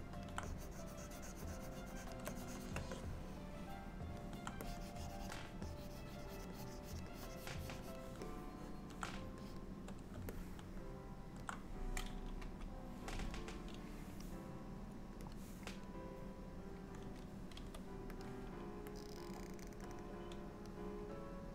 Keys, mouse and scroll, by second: 0.5 click, 2.3 shift+click, 3.0 middle click, 4.7 click, 6.6 click, 6.9 click, 7.2 click, 8.3 middle click, 9.5-9.8 shift+click, 10.4 middle click, 12.5 KP_1, 15.4 click, 16.3 click, 17.6 f, 19.0 click, 20.0 click, 21.3 click.